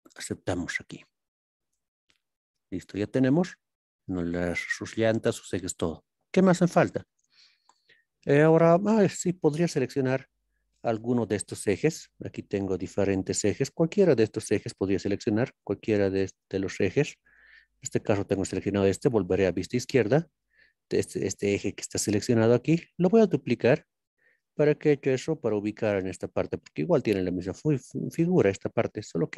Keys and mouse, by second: 0.0 click, 2.2-6.0 middle drag, 7.1 ctrl+KP_3, 9.6-10.8 middle drag, 11.8-13.3 middle drag, 16.3 click, 17.2 click, 19.1 ctrl+KP_3, 21.6-22.7 shift+middle drag, 29.0 click.